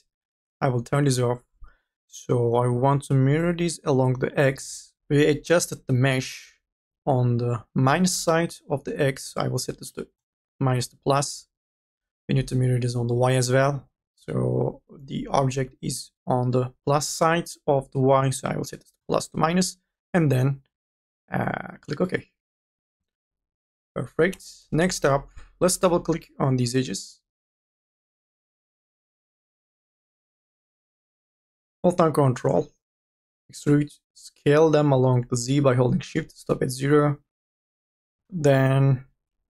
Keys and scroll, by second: 24.5 2, 24.9 e, 33.6 t, 36.2 e.